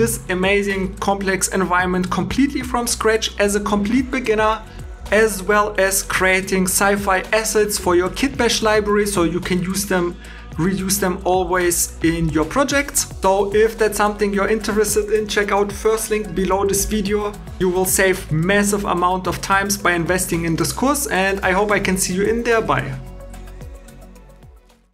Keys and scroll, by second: 13.2 super+Tab.